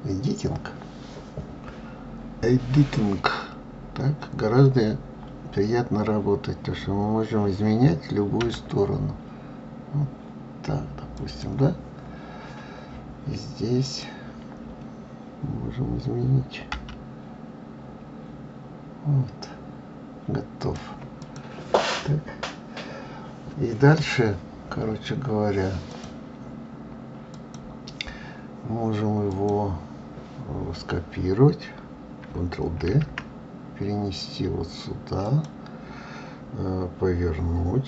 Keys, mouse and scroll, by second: 13.8 click, 16.7 g, 21.2 click, 25.9-28.9 drag, 29.3 click, 32.9 shift+d.